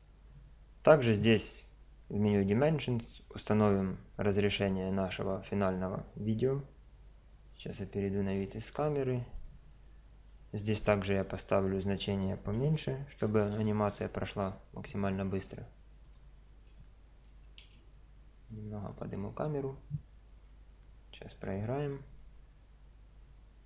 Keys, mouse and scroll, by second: 7.1 KP_0, 8.5-10.3 drag, 10.6 click, 10.8 KP_0, 11.1 click, 16.1-17.9 right drag, 17.3 g, 21.4-23.4 drag.